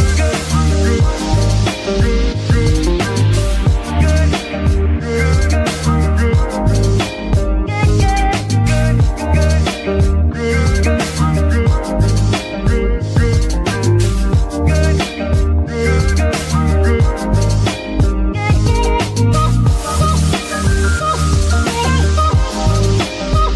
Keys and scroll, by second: 1.7 z, 3.6 ctrl+s, 5.5 ctrl+shift+s, 11.5 ctrl+s.